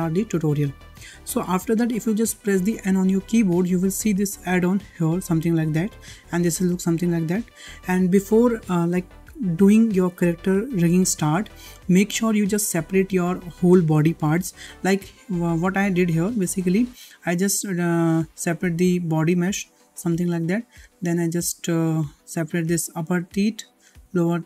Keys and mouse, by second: 2.7 n, 4.9 click, 7.6 n, 16.2 click, 18.5 g, 19.9 h, 22.6 g, 23.8 g.